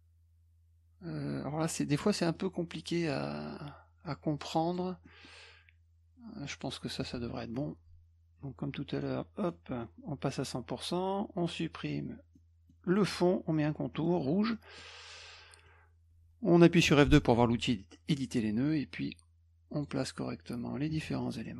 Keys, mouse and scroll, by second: 2.0 middle click, 4.7 click, 5.0 middle click, 6.5 click, 7.0 middle click, 8.9 right click, 9.4 click, 12.3 middle click, 12.9 click, 13.9 middle click, 14.5 middle click, 18.3-19.8 drag, 21.2 middle click.